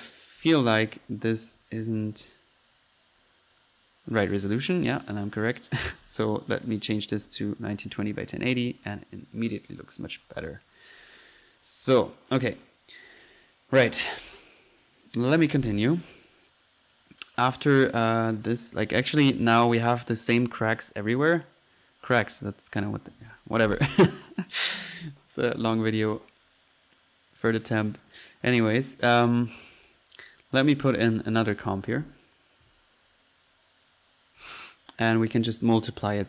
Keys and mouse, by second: 1.5-1.9 drag, 2.2-2.6 drag, 2.7 drag, 3.5 click, 6.0 click, 7.2 click, 7.7 click, 7.9 F1, 8.9 Escape, 9.4 click, 10.0 click, 10.3 click, 13.1-13.6 drag, 14.1 F1, 15.5 Escape, 17.1 right click, 17.1 click, 18.2 drag, 18.2 right drag, 18.5-18.9 right drag, 18.8 click, 19.1 click, 19.3 F1, 26.0 Escape, 26.5 click, 27.0-27.9 drag, 28.0 click, 28.5-28.8 drag, 28.9 drag, 29.3 click, 29.5 click, 30.3 right click, 30.3 drag, 30.5 right click, 30.9 click, 31.6-32.6 typing, 33.4 drag, 33.9 drag, 34.4 click, 34.8 click, 35.2 click, 36.1 click.